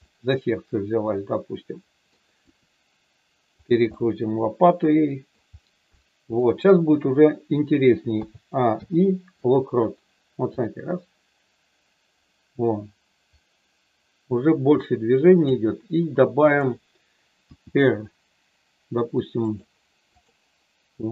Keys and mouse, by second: 0.0-2.1 middle drag, 2.3 r, 4.0-5.3 middle drag, 5.8 middle click, 8.1 a, 8.7 i, 10.6-15.6 drag, 16.3 click, 17.5 r, 19.5 click, 20.2 click, 20.8 r.